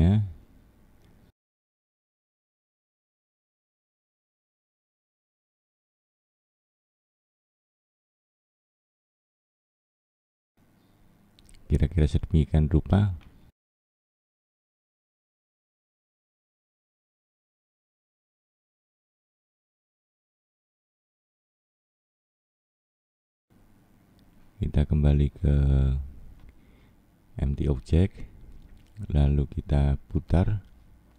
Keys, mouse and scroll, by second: 0.7 middle click, 2.1-2.7 scroll down 2, 2.7 middle click, 5.0-5.6 scroll down 4, 5.6-6.1 scroll up 1, 6.1 middle click, 7.4 click, 7.9 middle click, 8.9 click, 11.8 middle click, 13.1-13.5 scroll down 4, 13.8 middle click, 15.4 scroll down 2, 15.8 middle click, 17.1-18.9 scroll up 4, 18.9 click, 19.4 middle click, 23.4 click, 24.3 click, 25.4 middle click, 26.7-27.1 scroll up 1, 27.1 middle click, 28.5-29.0 scroll down 5, 29.2 middle click, 30.1 middle click.